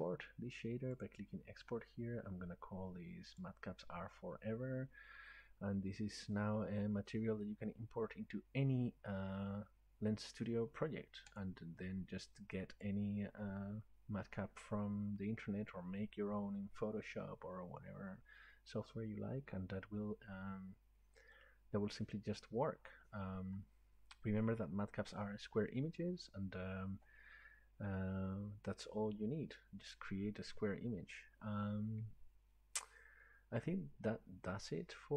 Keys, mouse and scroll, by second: 1.1 click, 3.4 click, 11.4 click, 13.7 click, 16.7-22.0 drag.